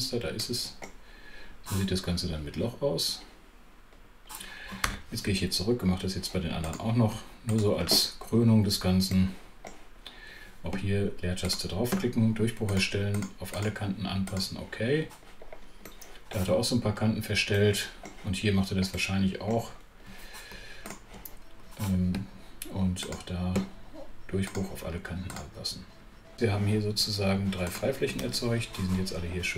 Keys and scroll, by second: 4.8 super+2, 10.6 space, 22.1 space.